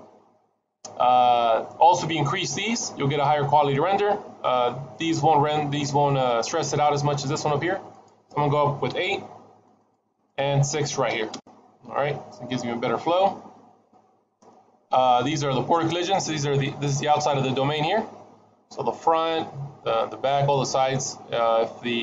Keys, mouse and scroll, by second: 7.8 click, 10.0 click, 13.3-16.7 scroll down 3.